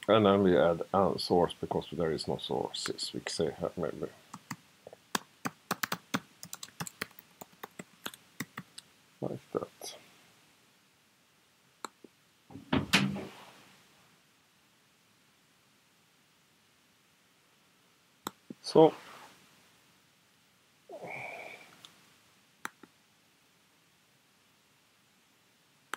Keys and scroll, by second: 4.3 alt+shift+8, 4.5 alt+shift+8, 4.9-8.3 typing, 8.4 alt+shift+9.